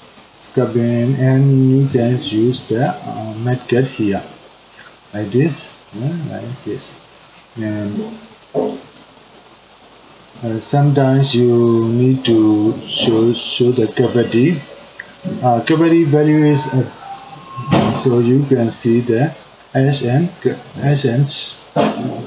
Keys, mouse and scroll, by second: 13.9-22.2 drag.